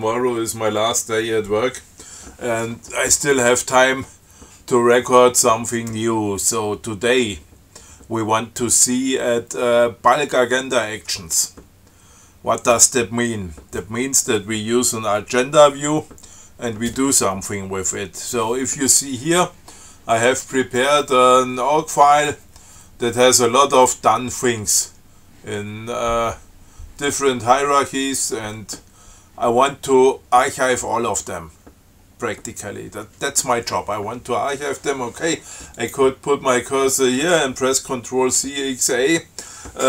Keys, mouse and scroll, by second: 36.0 click, 36.8 click.